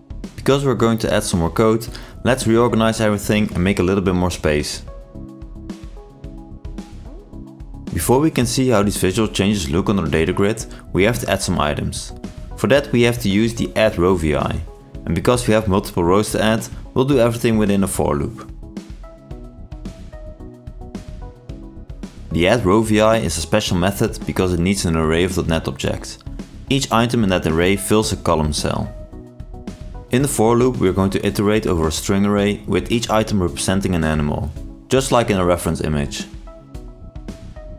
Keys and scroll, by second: 13.0 ctrl+space, 16.1 ctrl+shift+i, 17.7 ctrl+space, 22.6 ctrl+space, 25.8 ctrl+space.